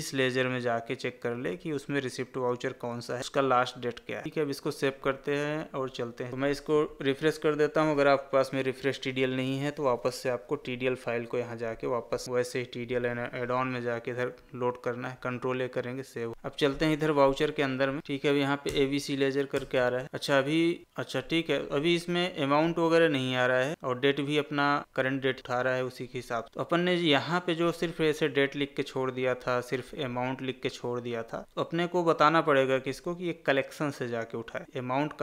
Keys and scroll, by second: 6.3 Escape, 15.1 ctrl+a, 20.8 Escape.